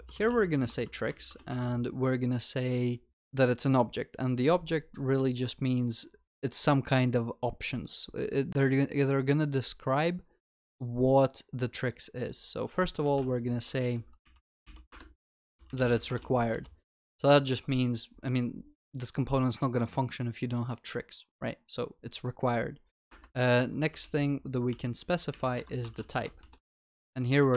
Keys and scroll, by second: 14.9 Return, 25.6 Return.